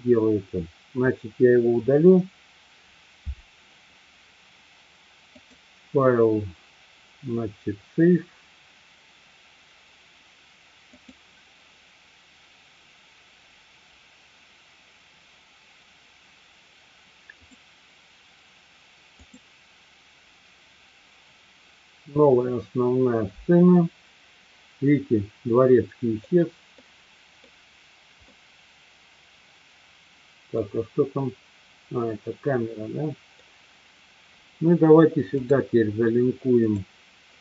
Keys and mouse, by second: 1.9 Delete, 5.3-15.9 drag, 17.4-23.1 drag, 25.6 middle click, 26.7-27.4 middle drag, 28.3-30.7 middle drag, 32.1-33.4 middle drag, 35.4-36.9 drag.